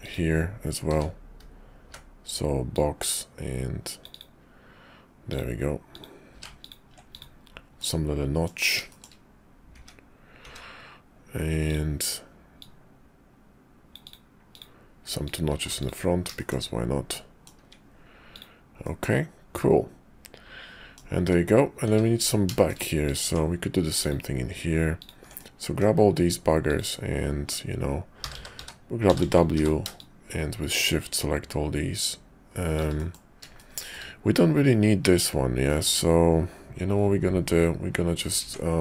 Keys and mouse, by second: 0.9 d, 1.4 d, 2.7-4.2 drag, 5.3 click, 5.9 click, 6.3 q, 7.1 click, 7.8 click, 8.9 shift+click, 9.7 `, 10.4 `, 11.7-14.1 drag, 14.5 click, 15.2 click, 15.5 q, 16.4 shift+middle click, 17.1 click, 17.6 `, 18.3 click, 18.8-21.0 middle drag, 21.2 `, 21.8 `, 22.5 shift+click, 23.0 click, 23.2 Tab, 24.0 click, 25.0 ctrl+click, 25.4 click, 26.7 ctrl+click, 28.2-29.5 typing, 30.0-32.8 shift+drag, 32.9 middle click, 33.5 shift+click, 33.6 middle click, 33.7 shift+click, 35.7 middle click, 38.4 Tab.